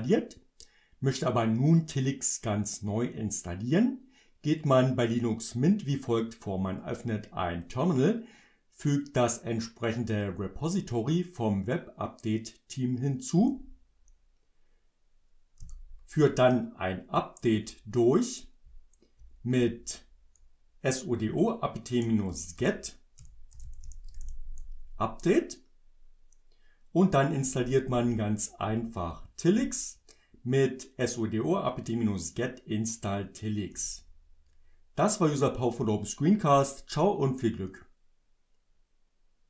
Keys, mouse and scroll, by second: 13.4 Return, 15.7 Return, 17.5 Up, 18.7 Up, 21.2 BackSpace, 23.3-24.7 typing, 27.5 Up, 28.7 Up, 33.7 Return.